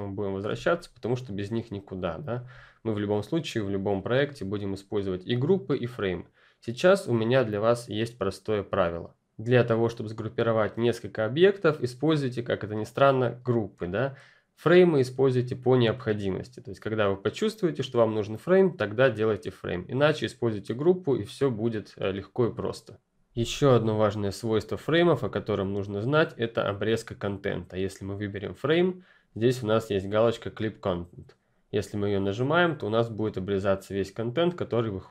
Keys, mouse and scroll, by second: 0.4 ctrl+space, 0.6-2.0 ctrl+scroll up 2, 2.0-2.4 ctrl+scroll up 1, 2.4-3.7 scroll down 2, 3.7 scroll down 1, 28.0 click, 32.1 click.